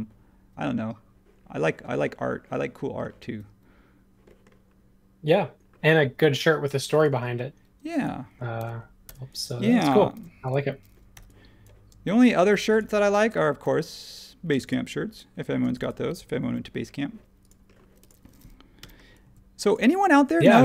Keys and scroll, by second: 7.1 space, 8.5 super+c, 9.0 BackSpace, 10.1 shift+v, 11.1 p, 12.4 e, 13.3 space, 16.4 super+1, 18.8 m.